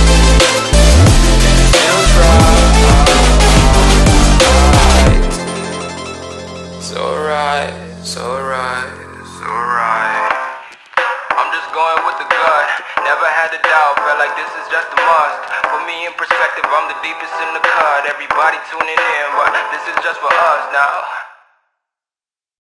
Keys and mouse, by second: 0.7-2.1 drag, 4.5 ctrl+-, 5.6 space, 5.9 click, 6.5-6.9 space, 8.9 click, 9.1 right click, 9.3 click, 10.0 space, 10.2 click, 10.6 ctrl+=, 11.2-13.1 typing, 11.3 click, 11.8 click, 12.4 ctrl+=, 13.0 click, 14.0 click, 15.7-16.5 shift+click, 16.7 ctrl+z, 17.9-21.6 drag.